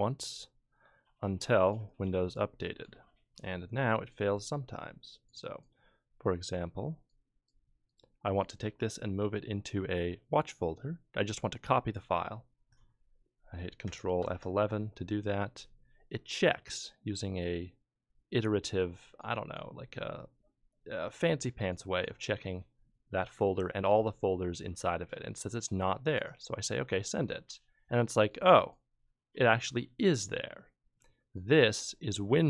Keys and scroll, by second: 14.2 ctrl+F11.